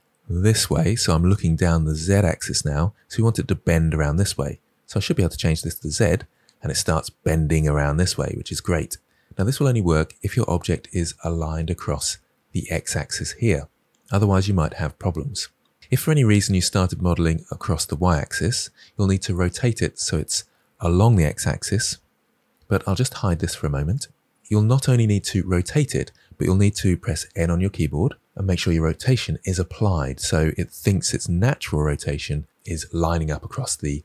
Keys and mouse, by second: 5.7 click, 23.8 click, 27.3 n.